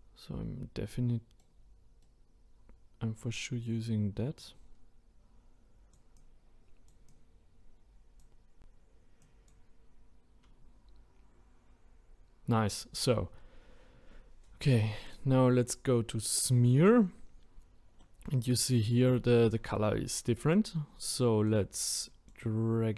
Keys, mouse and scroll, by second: 2.0-4.4 right drag, 4.4-12.2 drag, 15.1-17.4 drag, 17.4 scroll up 1, 18.0-18.8 middle drag, 18.8-19.6 scroll down 1, 19.6 scroll down 1, 21.1-22.9 drag.